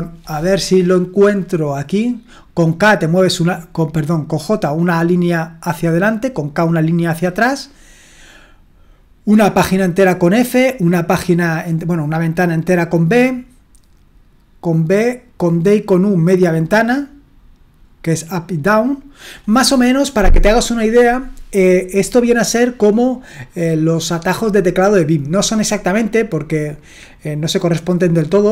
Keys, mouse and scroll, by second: 2.6-4.0 drag, 4.3-5.4 drag, 6.5-28.5 drag, 6.5-8.0 right drag.